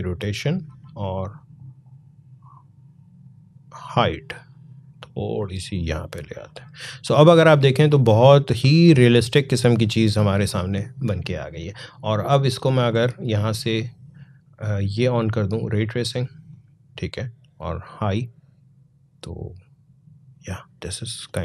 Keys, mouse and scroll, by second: 12.1-15.1 drag, 15.1 click, 21.0 click.